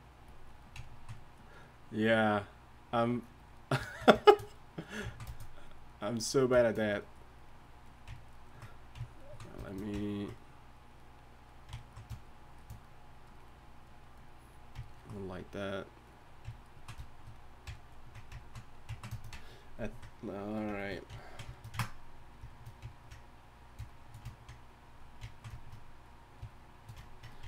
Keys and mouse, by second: 14.6-17.4 drag.